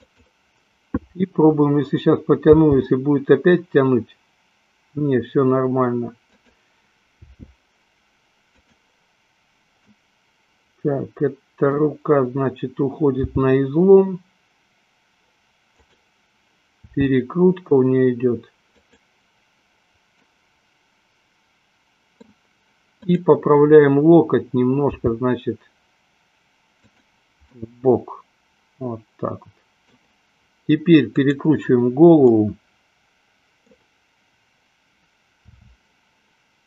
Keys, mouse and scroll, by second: 0.3 click, 2.8 g, 7.6 r, 8.9 click, 10.2-12.1 middle drag, 13.4 g, 17.2 r, 20.6-22.7 middle drag, 23.3 click, 25.3 g, 28.2-30.4 middle drag, 31.4 click, 32.6-34.1 middle drag, 35.7 r.